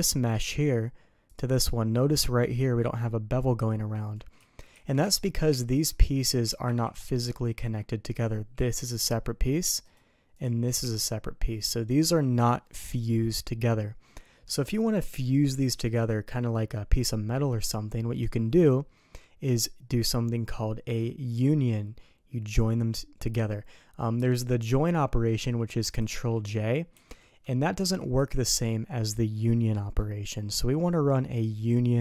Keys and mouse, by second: 1.2 click, 4.3 ctrl+z, 4.7 ctrl+z, 5.0 ctrl+z, 5.4 ctrl+z, 6.6 ctrl+z, 8.5 g, 10.3 click, 10.6 g, 12.3 click, 18.7 drag, 19.0 middle click, 26.9 ctrl+j, 27.7 ctrl+z, 28.1 ctrl+z.